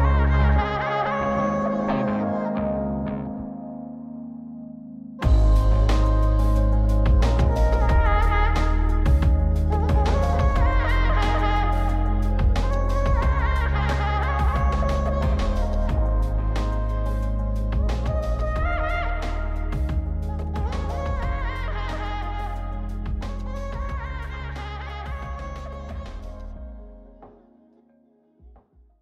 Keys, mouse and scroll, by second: 1.3-2.1 drag, 3.8 click, 6.3 scroll down 2, 6.5 middle click, 7.6-8.5 drag, 9.4-9.9 scroll down 2, 10.8 ctrl+shift+click, 12.2-13.2 scroll up 5, 13.2-15.9 drag, 16.5-18.7 drag, 18.9 scroll down 2, 19.2 middle click, 19.9 click, 19.9 scroll down 1, 20.9-22.5 drag, 23.3-24.4 drag, 26.0 scroll up 1, 26.4-28.6 drag.